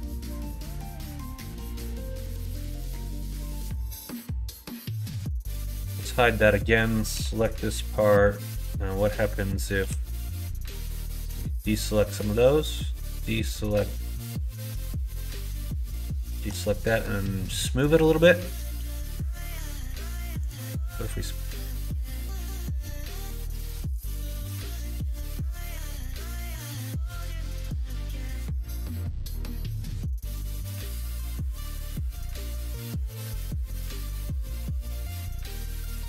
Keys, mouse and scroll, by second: 0.3 middle click, 2.3 c, 5.8 h, 6.1 middle click, 7.1 l, 7.9 middle click, 8.6 middle click, 9.8 b, 12.1-13.8 drag, 15.2 3, 16.0 alt+shift+click, 17.5-18.6 drag, 19.4 middle click, 20.5-22.2 drag, 22.8 middle click, 23.9-25.1 drag, 25.3 middle click, 26.5 alt+h, 27.4 middle click, 29.4 middle click, 30.5 middle click, 30.9-32.4 middle drag, 32.6 middle click, 33.1 ctrl+z, 33.6 middle click, 34.0 ctrl+z, 34.6 ctrl+z, 35.1 middle click, 35.9 3.